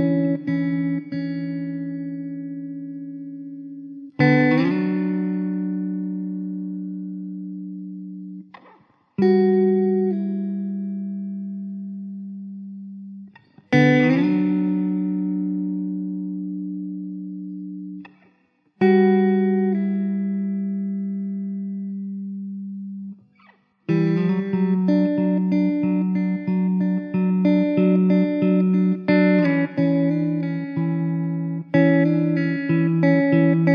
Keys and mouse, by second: 1.2 alt+middle click, 1.9 alt+w, 3.0 middle click, 3.5 1, 12.2 r, 16.9 alt+w, 17.5 middle click, 18.1 middle click, 22.4 alt+w, 23.1 middle click, 24.6 alt+w, 25.5 alt+middle click.